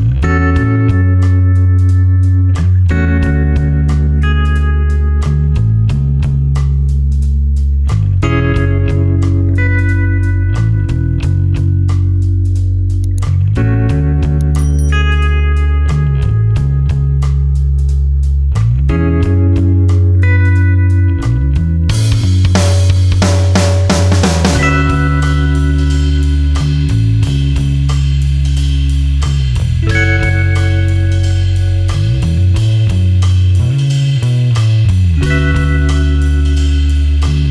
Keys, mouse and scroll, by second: 0.0 click, 3.2 click, 20.6 click, 29.7-30.8 scroll up 1, 30.8-31.7 scroll down 1, 34.6 click.